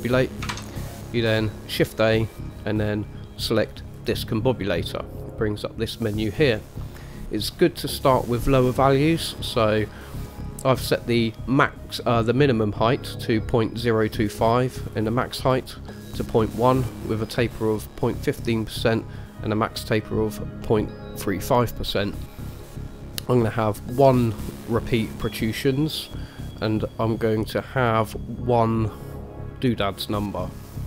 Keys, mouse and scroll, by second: 0.7 shift+a.